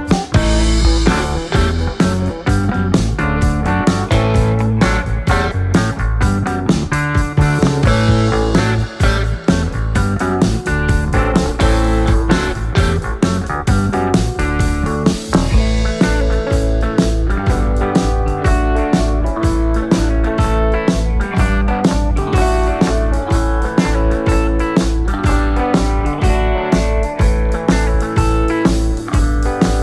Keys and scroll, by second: 27.3 ..